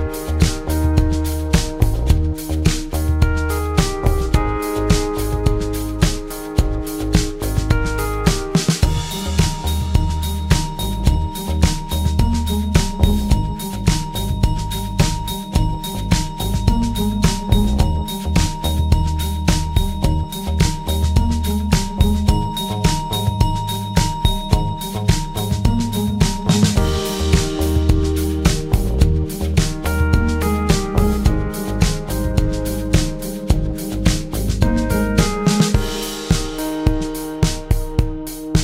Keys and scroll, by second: 0.3 shift+F6, 2.0 F1, 2.3 Page_Down, 2.7 Page_Up, 4.8 Home, 5.4-6.6 typing, 6.9 shift+F6, 12.1 F1, 13.0 space, 14.3-14.7 typing, 31.2 ctrl+z, 32.2 ctrl+z, 37.0-37.7 typing.